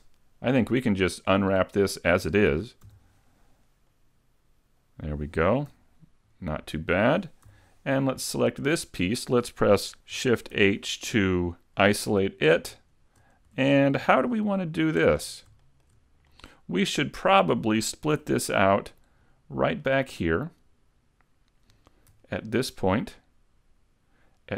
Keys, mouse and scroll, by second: 0.6 middle click, 2.9 u, 5.1-5.8 scroll down 1, 5.8 a, 7.5 l, 8.0 middle click, 10.6 shift+h, 11.7 middle click, 13.0 shift+scroll up 2, 14.3 shift+middle click, 15.3 scroll up 1, 15.6 shift+middle click, 16.3 middle click, 18.2 a, 18.6 middle click, 19.3 scroll down 1, 19.8 middle click, 22.4 alt+right click, 23.0 middle click.